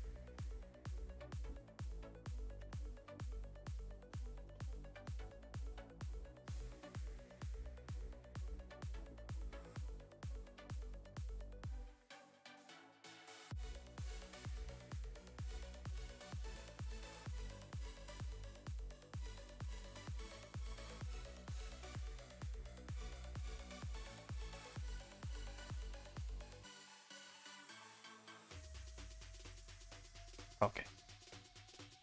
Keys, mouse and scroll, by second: 1.5 alt+click, 1.9 s, 2.6 Tab, 2.8 scroll down 2, 8.5 click, 9.6 click, 10.7 click, 11.8 click, 12.5 click, 15.2 click, 18.2-18.9 middle drag, 18.9-19.8 scroll up 9, 19.2 shift+middle drag, 19.8 middle drag, 26.5 middle click, 26.7 ctrl+s, 27.6 scroll down 4, 28.0 middle drag, 28.1 middle drag, 28.3-28.6 scroll down 2, 28.6-29.0 middle drag, 29.0 a, 29.2 a, 29.5 ctrl+s, 29.9-32.0 middle drag.